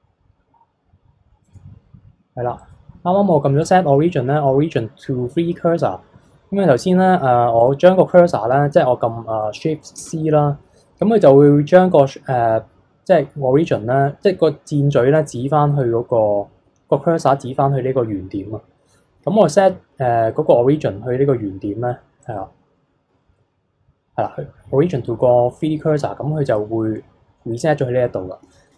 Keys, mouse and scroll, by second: 2.6-10.0 right drag, 10.0 shift+c, 22.2-26.9 right drag, 26.9-28.7 middle drag.